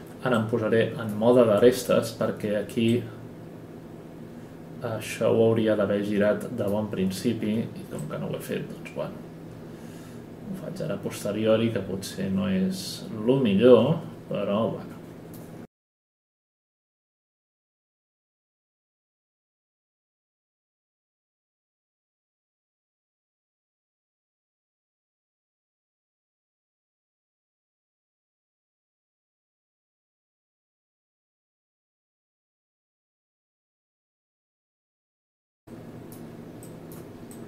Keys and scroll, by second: 7.4 w, 16.3 F11, 17.0 r, 17.5 w, 18.8 r, 19.3 F9, 19.6 w, 26.0 Right, 26.4 Right, 27.1-29.5 typing, 30.8 space, 31.1 space, 32.2 space, 32.3 space, 33.1 ctrl+z, 33.2 ctrl+z.